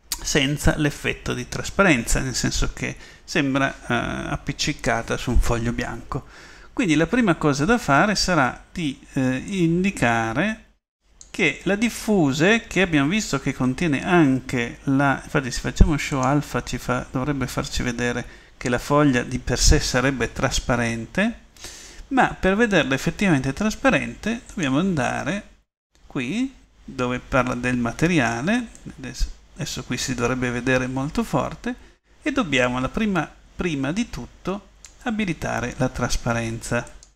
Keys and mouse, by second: 16.3-18.2 drag, 25.1-26.2 drag.